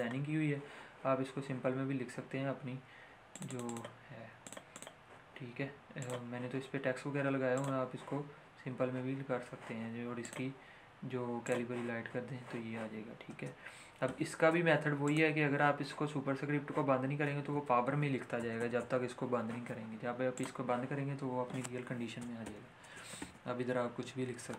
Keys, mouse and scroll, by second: 3.2-5.0 drag, 10.1 click, 13.2 space, 14.4 ctrl+z, 15.0 click, 17.0-18.1 typing, 20.3 click, 22.4 =, 23.2 shift+=.